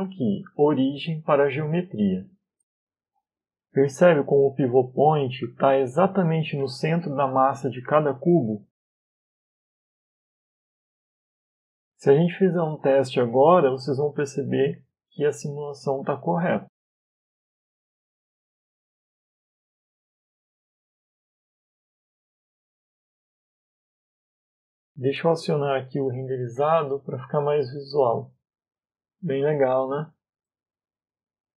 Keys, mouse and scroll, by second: 3.5 middle click, 3.9 scroll up 3, 4.4 middle click, 6.0 right click, 6.5 middle click, 7.8 right click, 8.6 middle click, 9.5 right click, 11.9-12.5 scroll down 2, 13.4 click, 13.8 click, 14.8 click, 18.8 middle click, 20.4 scroll down 1, 21.0 middle click, 27.5 click, 29.1-29.4 scroll up 3, 29.9 middle click, 30.5-31.3 scroll down 2, 30.9 middle click.